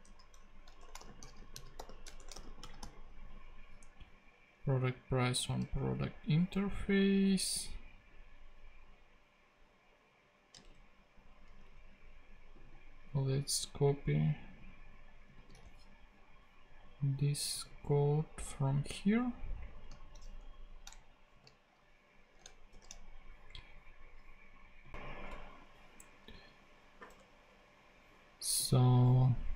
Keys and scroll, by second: 0.6-3.1 typing, 5.9 super+Tab, 10.6 super+Tab, 15.3 super+c, 15.5 super+Tab, 20.4 shift+Down, 20.9 shift+super+Down, 21.3 shift+super+v, 21.9 super+v, 22.7 shift+super+p, 25.3 BackSpace, 27.1 BackSpace.